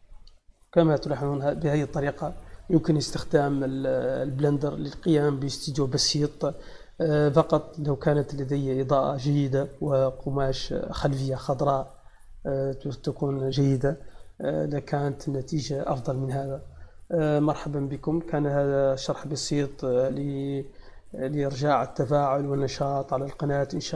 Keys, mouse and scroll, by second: 0.3 shift+middle click.